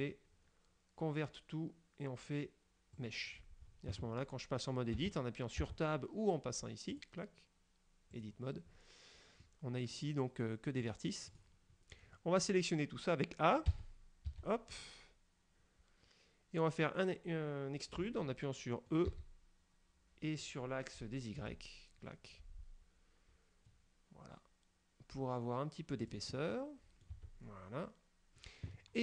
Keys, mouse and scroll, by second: 3.1 click, 5.1 Tab, 5.7 Tab, 7.0 click, 8.2 click, 9.5 middle click, 10.9 right click, 11.4 right click, 11.9 scroll down 2, 12.3 middle click, 13.8 a, 14.8-19.2 middle drag, 19.2 e, 21.5 y, 26.1 click, 26.5 middle click, 26.5 click, 27.2 Tab, 27.3 middle click, 27.6-28.6 middle drag.